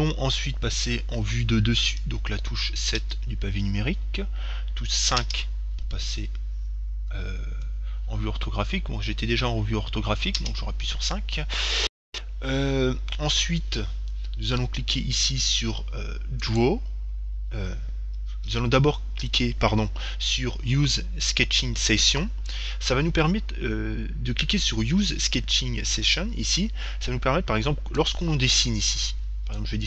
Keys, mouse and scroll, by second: 3.2 KP_7, 5.4 KP_5, 6.8 middle click, 7.3-8.6 scroll up 1, 8.6-9.7 middle drag, 10.6 KP_5, 11.7-14.5 middle drag, 16.7-18.6 drag, 28.2-29.8 drag.